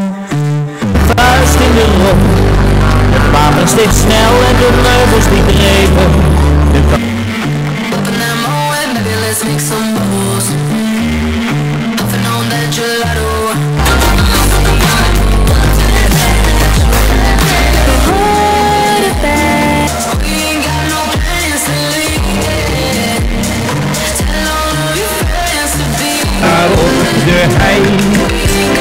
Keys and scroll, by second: 7.3 Page_Down, 19.8 Page_Down.